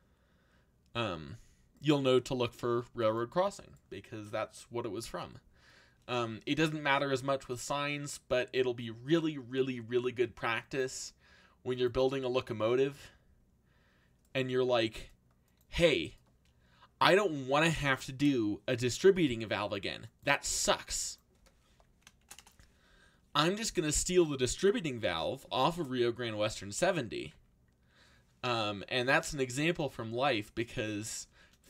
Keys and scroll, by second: 18.0 0, 18.2 Return, 21.7 3, 22.2 shift+', 22.3 Return, 23.3 a, 24.9 0, 25.1 Return, 29.3 z.